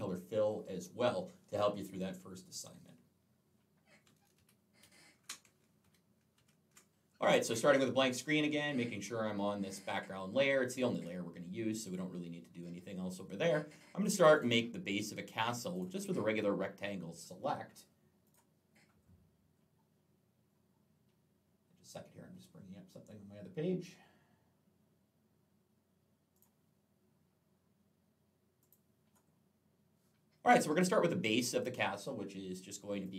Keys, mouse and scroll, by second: 4.2 ctrl+z, 14.2 right click, 15.6 click, 18.1 click, 18.9-19.9 scroll down 3, 26.2 click, 28.4 click, 29.1-29.5 scroll down 3, 32.9 click.